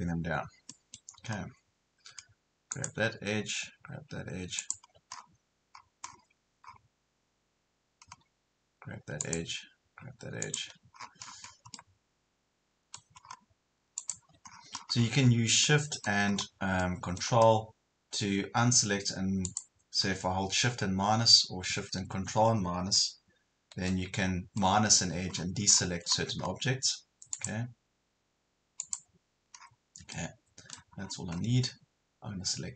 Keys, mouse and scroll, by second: 0.7 middle click, 1.3 scroll up 1, 2.7 click, 4.6 ctrl+click, 5.2 scroll down 1, 5.7 scroll up 1, 6.7 scroll down 1, 7.5 scroll up 1, 9.2 ctrl+click, 10.5 ctrl+click, 11.0 scroll down 1, 11.7 middle click, 13.2 scroll up 1, 14.0 ctrl+click, 14.5-14.9 scroll down 2, 15.7 middle click, 16.3 scroll up 1, 16.8 middle click, 17.5 scroll up 1, 19.5 ctrl+click, 24.2 scroll down 1, 24.6 middle click, 25.3 scroll up 1, 27.3 ctrl+click, 28.8 ctrl+click, 29.6 scroll down 1, 30.1 ctrl+middle click, 31.0 scroll up 1.